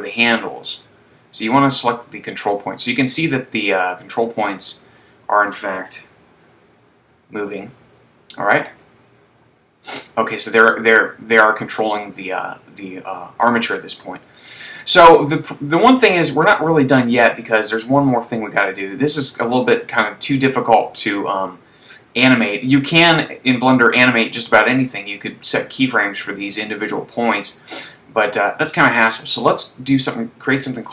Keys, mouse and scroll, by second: 0.7 click, 6.2 super+z, 9.4-10.3 scroll down 1, 18.5 right click.